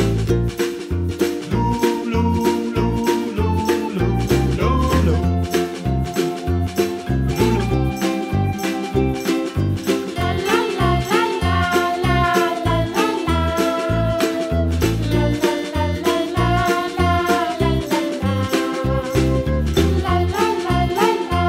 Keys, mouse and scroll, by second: 1.9 click, 2.8-4.0 drag, 5.1 click, 6.2-6.7 drag, 7.0 Delete, 7.3-7.6 middle drag, 7.6 click, 8.1 g, 9.5 KP_Decimal, 9.8-10.2 scroll down 5, 10.5 g, 12.2 g, 13.1 g, 13.9 s, 15.2 KP_Decimal, 15.4 scroll down 1, 15.7 g, 16.7 g, 17.5 g, 18.7 middle drag, 19.0-19.4 scroll down 2, 19.4 KP_Decimal, 20.1 s.